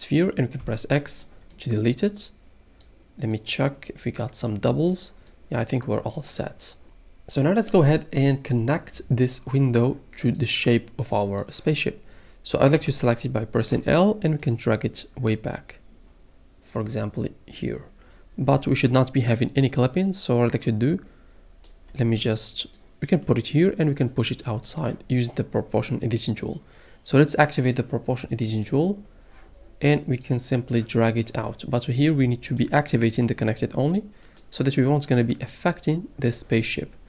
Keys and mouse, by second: 0.6 x, 11.1-12.7 middle drag, 12.7 l, 13.6 l, 22.5-24.3 middle drag, 28.5 click, 32.5-34.8 drag.